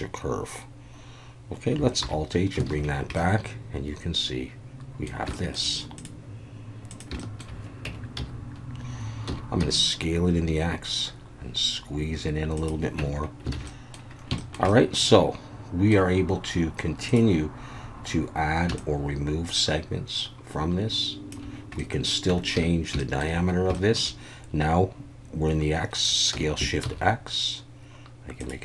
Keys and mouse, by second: 2.6 alt+h, 2.7 alt+a, 3.2-5.1 middle drag, 5.3 shift+middle drag, 6.0 click, 6.9 click, 7.2 shift+middle click, 7.9 Tab, 8.2 a, 9.3 s, 9.6 x, 12.5 click, 13.0 Tab, 13.5 alt+a, 13.7 middle drag, 14.4 shift+middle drag, 14.7-15.9 middle drag, 17.1 click, 18.8-21.4 shift+drag, 21.8-22.1 middle drag, 22.3 Tab, 22.5 a, 23.0 shift+middle click, 23.8 shift+middle click, 26.3 s, 26.8 shift+x, 28.4 click.